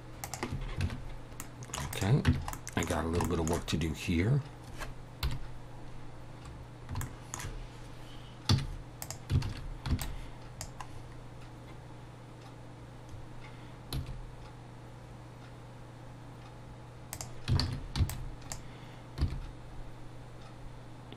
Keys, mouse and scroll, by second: 0.8 Tab, 0.8 alt+a, 0.8 middle click, 0.8 scroll down 5, 0.9 Tab, 1.4 middle click, 1.9 click, 2.3 Tab, 2.5 middle click, 3.2 shift+middle click, 5.2 KP_7, 7.0 shift+middle click, 8.5 z, 9.5 alt+a, 9.9 b, 10.9-11.6 scroll up 2, 13.1 scroll up 2, 14.0 g, 17.6 alt+a, 18.0 b, 19.2 g.